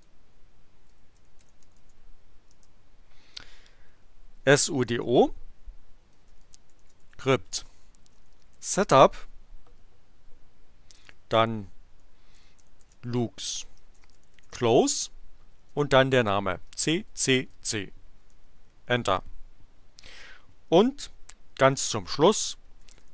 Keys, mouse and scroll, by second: 0.6-2.3 typing, 2.4 Return, 4.2-9.1 typing, 10.9 space, 12.0-15.5 typing, 16.6 c, 18.2 Return, 22.5-23.1 typing.